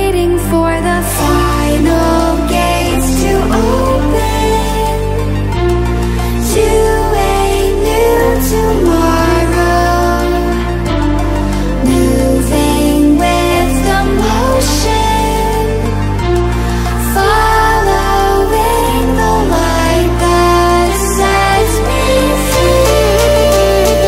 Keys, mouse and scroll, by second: 3.5 alt+shift+click, 8.3-8.7 ctrl+alt+scroll up 1, 9.1 click, 15.4-17.3 drag, 19.2 ctrl+alt+scroll up 1, 20.2-24.0 drag.